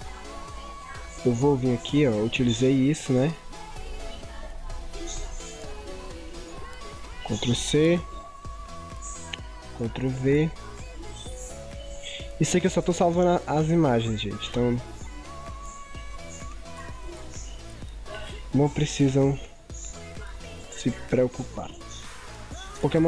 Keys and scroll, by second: 7.4 ctrl+c, 10.0 ctrl+v.